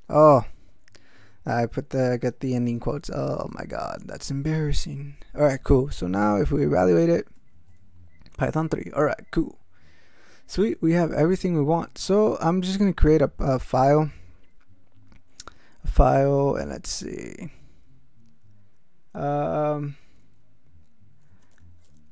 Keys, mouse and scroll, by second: 0.2 BackSpace, 0.5 shift+', 2.9 shift+0, 3.7 ctrl+shift+x, 3.9 ctrl+s, 7.0 ctrl+x, 7.3 ctrl+e, 16.4 ctrl+x, 16.6 ctrl+f, 21.5 e, 21.8 BackSpace.